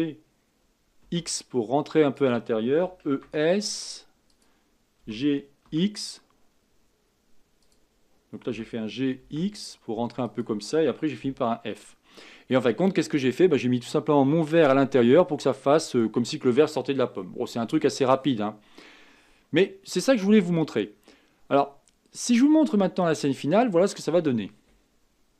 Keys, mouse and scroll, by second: 2.8 e, 5.1 g, 8.6 g, 11.2 f, 11.5 scroll down 2, 11.9 middle click, 12.8-15.4 scroll down 5, 15.4-23.1 middle drag, 23.1-25.3 scroll down 2.